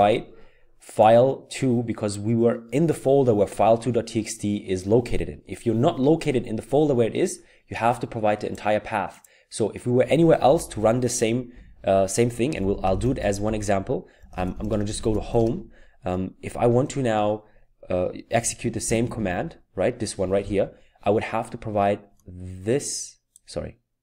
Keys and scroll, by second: 10.5 Down, 12.4-15.7 typing, 18.6 Up, 19.0 typing.